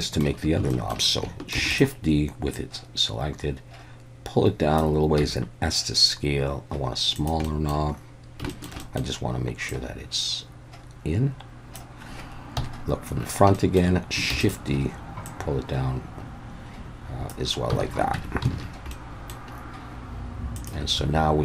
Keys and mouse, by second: 0.1 shift+middle click, 0.7 shift+middle click, 1.6 shift+d, 1.7 click, 2.6-4.8 drag, 5.2 s, 7.1 click, 7.5 middle click, 8.5 shift+middle click, 8.9 middle click, 9.7-11.8 drag, 12.6 KP_1, 13.7 shift+middle click, 14.4 shift+d, 15.3-17.3 drag, 17.8 alt+a, 18.2 Tab, 18.6 alt+a, 18.9-19.3 middle drag.